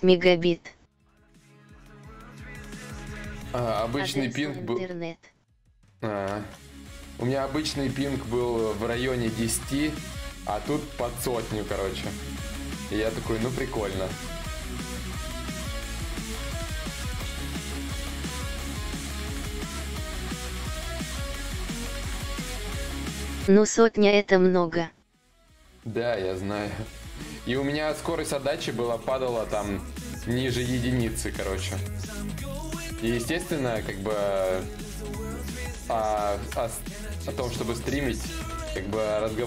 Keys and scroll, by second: 32.2 ctrl+z, 32.2 ctrl+y, 37.8 ctrl+z, 38.1 ctrl+z, 38.3 ctrl+z, 39.2 ctrl+z.